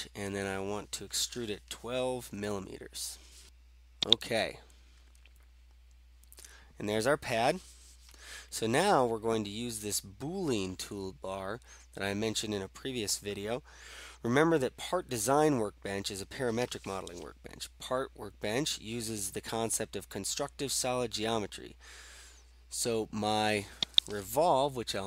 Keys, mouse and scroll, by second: 2.0-2.3 typing, 4.1 click, 5.7-6.8 middle drag, 5.7-6.7 scroll, 23.9 click.